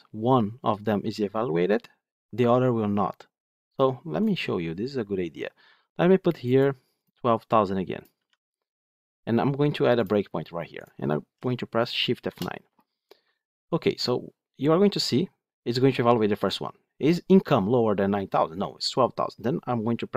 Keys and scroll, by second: 9.9 ctrl+F8, 12.1 shift+F9.